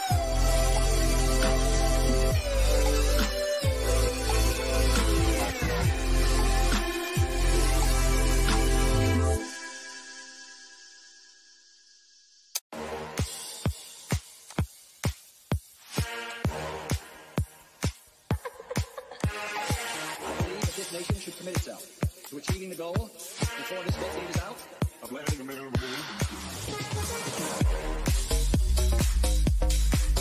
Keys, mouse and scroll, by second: 3.5-4.2 scroll up 1, 4.5 middle click, 6.3 click, 7.5-8.2 scroll up 1, 13.7 click, 18.4 click, 21.5 click, 24.5 click, 28.9 Return.